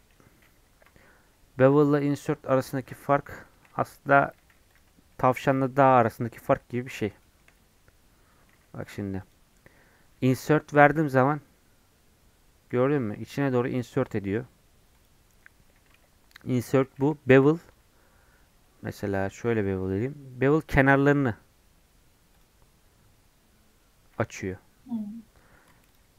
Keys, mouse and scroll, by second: 0.1 ctrl+z, 1.4 scroll down 2, 1.6-2.7 middle drag, 2.7 ctrl+z, 3.5-4.5 shift+middle drag, 4.5 3, 4.7 click, 5.1 middle click, 5.5-7.0 drag, 7.0 scroll down 1, 7.2 shift+middle click, 7.6-8.2 scroll up 1, 8.2 scroll down 2, 8.6 e, 10.8 i, 16.9 ctrl+z, 17.5 2, 19.7 ctrl+b, 25.9 alt+click.